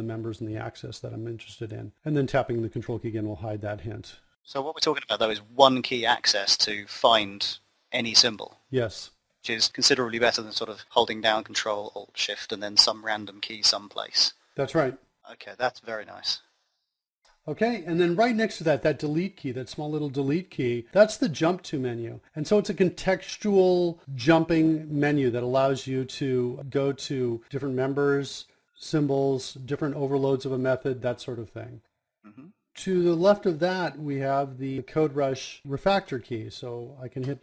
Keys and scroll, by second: 19.0 KP_Decimal, 35.8 KP_0.